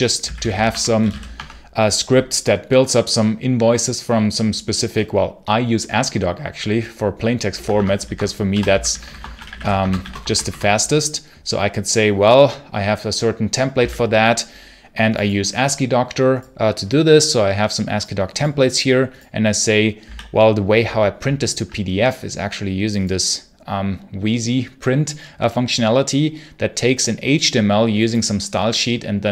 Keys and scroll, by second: 0.0-1.4 typing, 7.4 Escape, 8.1-10.6 typing, 13.7 d, 19.9 d.